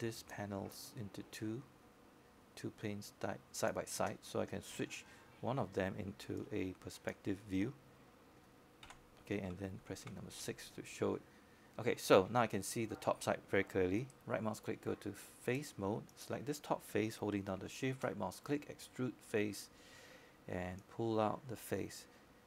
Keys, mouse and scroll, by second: 2.5 click, 11.0 space, 11.0 space, 12.3 middle click, 13.6 z, 14.8 6, 15.9-18.9 scroll up 1, 18.9 right click, 21.0 click.